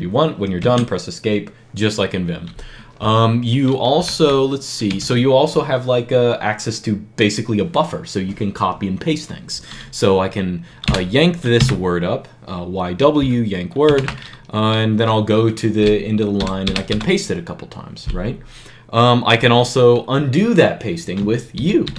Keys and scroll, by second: 0.4 Escape, 3.8 b, 4.0 b, 4.7 w, 6.2-6.9 typing, 10.7 y, 11.4 w, 13.7 shift+4, 16.2-16.7 typing, 21.4 u.